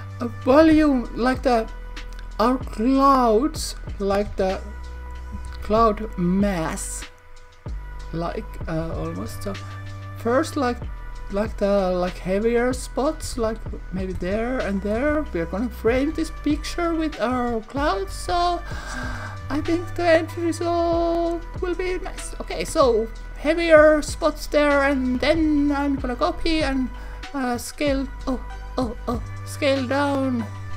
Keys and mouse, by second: 0.2 click, 0.6 shift+d, 2.6 click, 4.3 shift+d, 5.1 click, 5.4 shift+d, 8.0 click, 9.2 shift+d, 13.1 click, 13.3 shift+d, 14.0 click, 14.1 shift+d, 14.7 click, 15.0 shift+d, 15.8 click, 17.0 click, 17.9 click, 18.9 click, 21.1 click, 25.3 shift+d, 30.3 click.